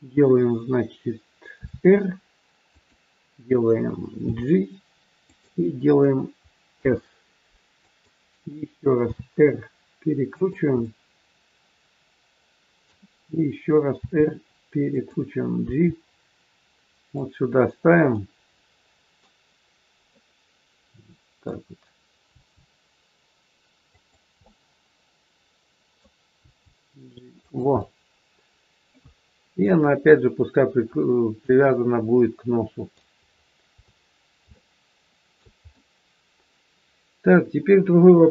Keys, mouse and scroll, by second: 1.6 r, 4.2 g, 6.7 s, 9.0 r, 10.8 middle click, 14.0 r, 15.6 g, 18.1 middle click, 20.0 middle click, 22.3 g, 24.5 middle click, 26.4 g, 27.7 middle click, 30.2-30.8 scroll up 2, 30.8-31.5 scroll down 1, 31.5 middle click, 33.1-33.7 scroll down 3, 33.8-34.4 scroll down 2, 34.5 shift+middle click, 35.7 middle click.